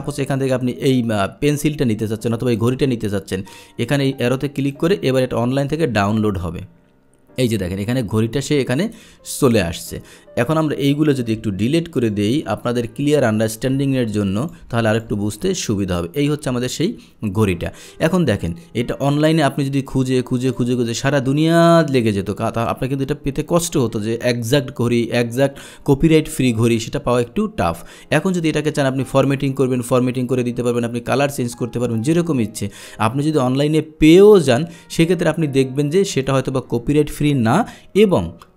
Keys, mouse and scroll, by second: 2.7 click, 4.8 click, 7.6 click, 9.0 click, 10.5 click, 11.6 Delete, 12.0 click, 12.2 Delete, 12.4 Delete, 12.7 click, 13.2 Delete, 13.6 click, 13.9 Delete, 14.5 click, 14.5 Delete, 14.9 Delete, 14.9 click, 15.3 Delete, 15.9-16.9 drag, 20.5 click, 29.2 click, 36.3 click.